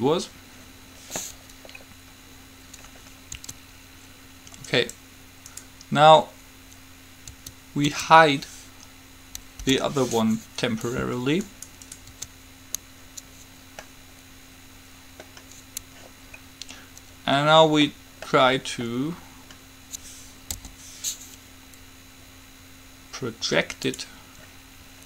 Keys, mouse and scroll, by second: 0.1-1.8 drag, 1.8-3.1 middle drag, 3.6 Tab, 4.8 click, 5.0 right click, 7.5 Tab, 8.0 Tab, 9.8 h, 11.7 right click, 12.3 Tab, 12.6 right click, 14.0-15.5 middle drag, 16.5-18.5 middle drag, 20.8 u.